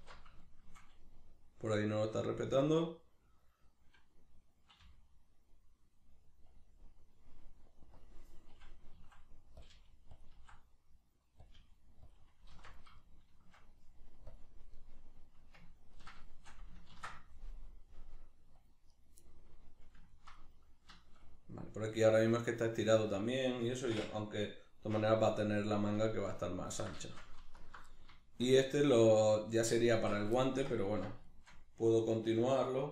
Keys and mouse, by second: 0.0 alt+q, 6.6 click, 9.0 s, 10.2 click, 10.3 s, 11.5 click, 11.6 g, 12.1 click, 12.5 alt+q, 13.0-14.3 shift+middle drag, 14.3 click, 14.8-19.0 middle drag, 16.9 ctrl+r, 19.0 right click, 19.2-27.6 middle drag, 27.6 alt+right click, 27.9-30.0 middle drag, 30.0 alt+q, 30.4-32.9 shift+middle drag.